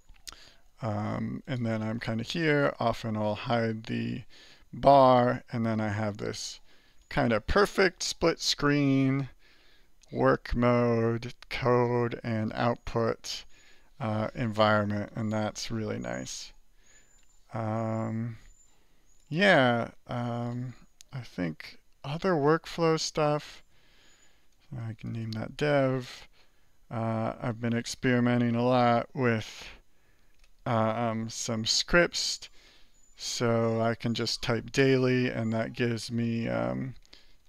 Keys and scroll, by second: 2.1 ctrl+c, 3.5 alt+b, 16.8 alt+b, 21.2 alt+5, 22.1 alt+Return, 23.5 alt+4, 24.3 alt+n, 24.4-25.5 typing, 26.3 alt+5, 31.1-32.6 typing, 35.5-37.4 typing.